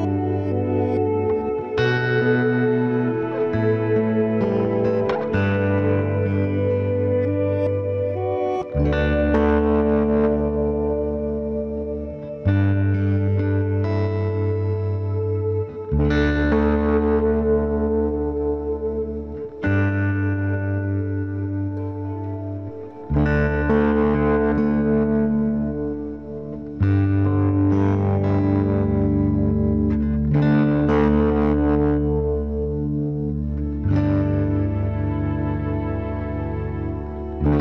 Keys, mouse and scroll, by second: 1.2-2.9 right drag, 2.2 KP_Decimal, 3.1 ctrl+s, 4.7 e, 7.5-9.1 right drag, 8.1 KP_Decimal, 9.1 click, 9.4 b, 12.5 g, 14.1 g, 15.0-19.1 right drag, 15.1 b, 15.6 g, 17.4 b, 17.9 g, 18.9 b, 19.3 g, 21.8-23.1 right drag, 22.4 b, 22.8 g, 25.3 click, 25.5 b, 25.9 g, 27.1 b, 27.4 g, 28.7-30.7 drag, 29.9 KP_Decimal, 32.0 b, 32.3 g, 33.3 right click, 33.4 b, 33.8 g, 35.0 b, 35.4 g, 36.7 b, 37.5 g.